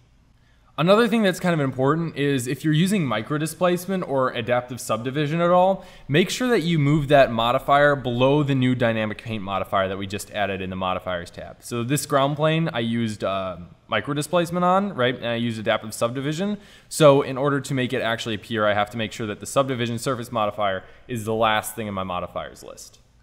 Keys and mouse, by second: 0.3-1.3 drag, 1.5 middle click, 5.7-7.5 drag, 8.5-10.5 drag, 12.4 click.